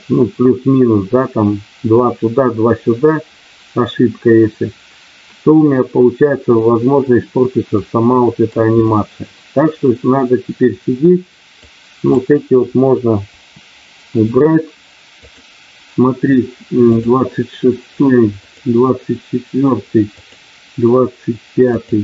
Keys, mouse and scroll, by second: 7.7 middle click, 11.6 click, 13.2 Delete, 15.2 click, 16.9 click, 18.5 click, 20.1 click, 21.6 click.